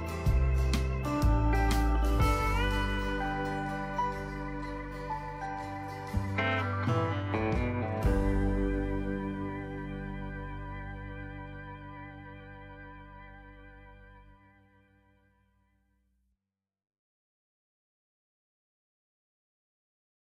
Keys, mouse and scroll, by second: 14.8-16.1 drag.